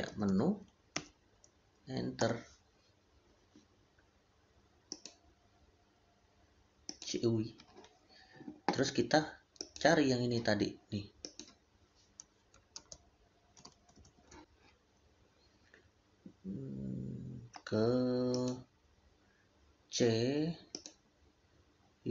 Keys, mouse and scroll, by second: 0.0-0.5 typing, 2.0 Return, 4.7 Return, 4.8 click, 9.4 click, 12.6 ctrl+a, 13.4 ctrl+c, 13.7 ctrl+c, 13.9 ctrl+c, 14.4 click.